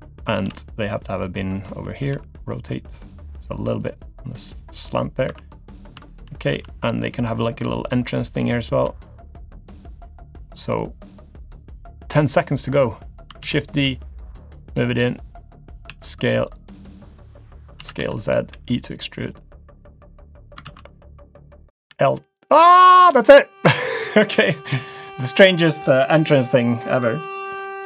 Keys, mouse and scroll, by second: 0.4 shift+d, 2.1 r, 3.9 g, 4.8 middle click, 5.3 Tab, 5.7 middle click, 6.1 shift+middle click, 6.3-7.4 scroll up 3, 6.5 Tab, 7.4 click, 7.8 shift+click, 9.2-9.5 scroll up 1, 9.9 click, 13.1 click, 13.4 shift+d, 14.1 click, 15.2 click, 15.9 s, 17.8 s, 18.5 e, 19.7 click, 20.6 ctrl+z, 21.9 l, 22.4 click, 23.8 click, 24.4 middle click, 24.8-25.2 scroll down 2, 25.2 middle click.